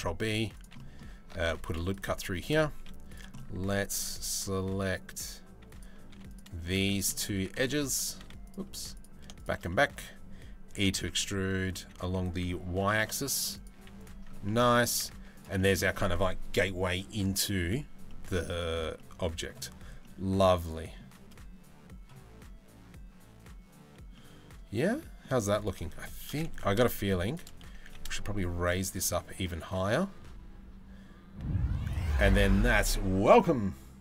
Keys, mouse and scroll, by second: 0.4 click, 1.0 ctrl+r, 1.8 3, 2.4 z, 3.0 click, 3.5 ctrl+r, 5.7 2, 6.5 middle click, 7.2 3, 7.5 click, 7.8 z, 9.3 middle click, 10.4 e, 14.1 middle click, 14.8 Tab, 15.2 middle click, 17.7-18.1 middle drag, 18.6-19.1 middle drag, 19.6 middle click, 23.8-24.8 middle drag, 27.3 g.